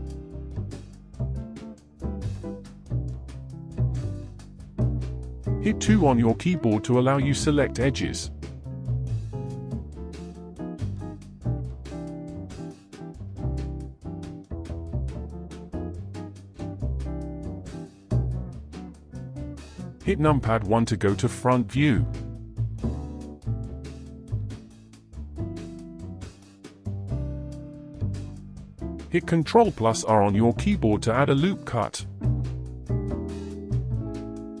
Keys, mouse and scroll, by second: 1.0-4.0 middle drag, 4.4 middle click, 5.3 2, 7.0-7.4 scroll down 5, 7.4-8.6 scroll up 11, 8.6-10.5 scroll up 2, 10.5-11.4 scroll up 5, 12.1 2, 14.1-15.1 shift+middle drag, 15.1 click, 16.4 click, 17.5 click, 19.5 click, 20.9 KP_1, 21.9-25.6 shift+middle drag, 25.6 ctrl+z, 26.0-27.0 middle drag, 27.0-27.4 scroll down 3, 28.2 ctrl+r, 32.2-32.9 scroll up 4, 32.9-34.6 scroll down 2.